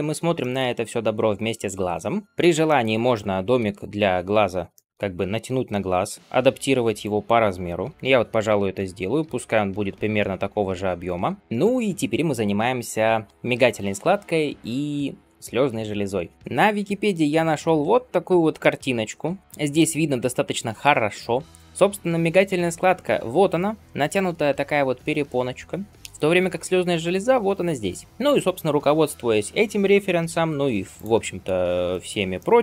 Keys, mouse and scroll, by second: 0.2 shift+middle drag, 0.8-1.3 scroll up 1, 1.3 scroll down 1, 2.2 middle click, 2.5 shift+middle click, 3.4 KP_3, 4.6 shift+middle click, 5.1-5.8 scroll up 1, 6.2 g, 6.2 s, 11.4 shift+middle click, 11.4 scroll down 2, 16.0 scroll up 1.